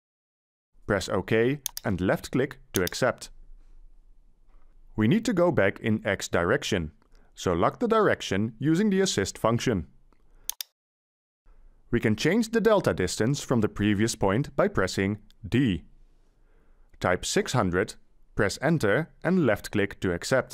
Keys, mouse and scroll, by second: 15.0 d, 17.4 6, 18.0 0, 18.6 0, 19.6 Return.